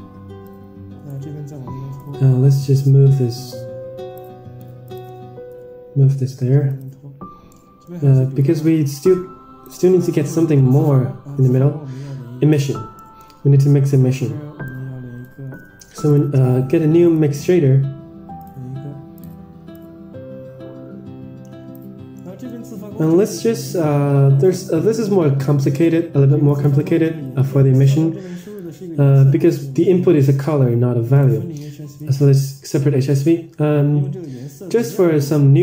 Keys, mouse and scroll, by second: 0.4-1.0 drag, 2.1-4.6 drag, 4.8 shift+click, 5.4 g, 7.4 middle click, 8.3-9.6 drag, 9.8 middle click, 10.1 Tab, 10.4 middle click, 10.9-12.1 scroll up 6, 12.4 Tab, 12.9 middle drag, 13.2 scroll down 4, 13.5 middle click, 14.6 click, 15.4 shift+a, 20.0-22.0 drag, 22.1-22.4 middle drag, 22.8-23.2 scroll down 6, 23.1 middle click, 23.4 middle click, 24.1-25.4 scroll up 8, 24.4 middle click, 25.5 middle drag, 26.4 drag, 27.1 click, 27.8-28.8 drag, 29.9 shift+a.